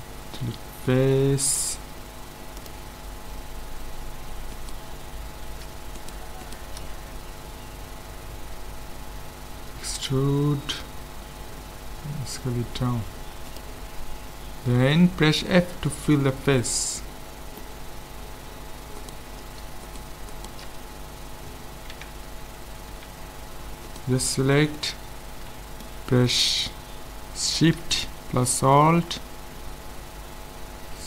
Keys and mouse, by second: 1.6 ctrl+Tab, 4.0 click, 4.5-8.2 right drag, 9.6 e, 11.0-12.2 middle drag, 12.0 s, 15.6 f, 17.5-19.0 middle drag, 19.0-22.0 right drag, 21.9 Tab, 22.9 Tab, 23.9-25.4 right drag, 25.7 middle click.